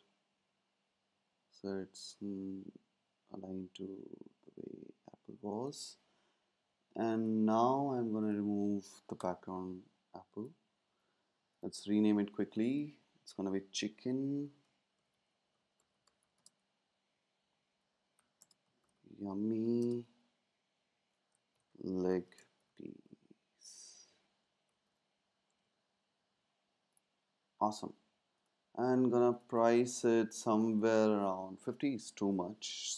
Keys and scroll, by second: 9.2 BackSpace, 14.8-16.7 typing, 18.0-20.0 typing, 21.2-26.0 typing.